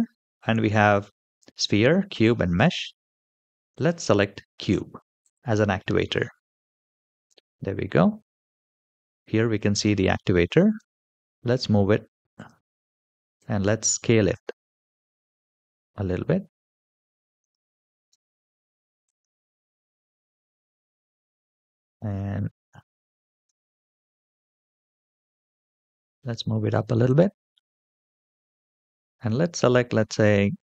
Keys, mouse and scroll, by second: 8.0 KP_7, 10.5 g, 13.2 s, 17.9 g, 20.4-21.5 middle drag, 22.2-22.5 shift+middle drag, 23.2 g, 26.0-27.2 middle drag, 28.6-30.7 drag.